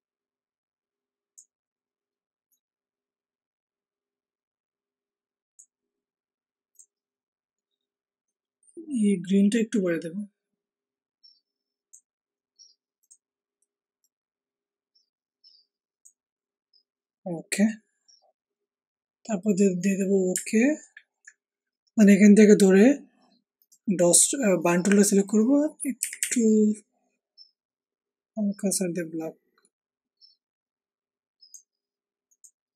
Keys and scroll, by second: 26.0 [.